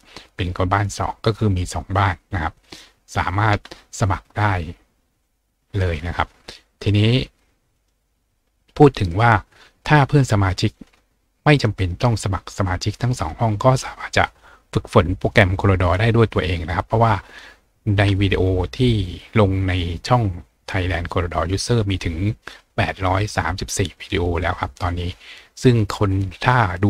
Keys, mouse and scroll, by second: 2.6 click, 5.8 click, 7.7 click, 10.7 click, 16.0-16.9 scroll down 2, 16.9-17.7 scroll up 2.